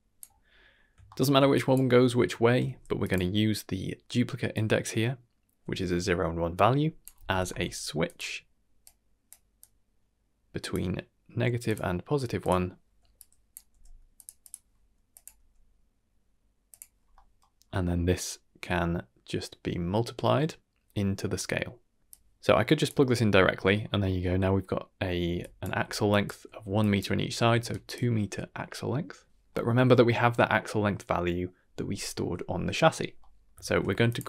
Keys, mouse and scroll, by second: 0.7 scroll up 2, 1.0 shift+middle click, 1.5 drag, 1.9 scroll down 2, 2.1 middle click, 2.6 g, 3.3-4.5 scroll up 2, 4.5-8.1 drag, 8.8-9.3 drag, 9.6-10.8 drag, 11.6 click, 12.4 click, 13.1-13.5 drag, 13.7 g, 14.4 click, 15.1 click, 15.3 g, 17.1 middle click, 17.8 middle click, 22.0 middle click, 22.0-22.8 drag, 23.7-24.3 scroll up 2, 25.2-27.5 typing, 25.4 click, 26.1 click, 26.8 click, 27.7 click, 27.7 right click, 29.5 middle click, 33.2 middle drag, 33.6 shift+a.